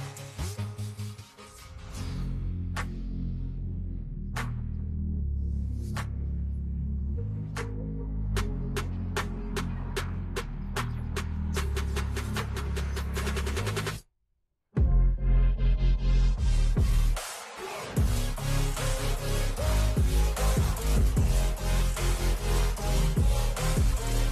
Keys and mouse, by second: 1.7 click, 6.4 click, 8.5 ctrl+h, 17.5 ctrl+g, 18.3 click, 18.5 click, 19.2-23.6 typing.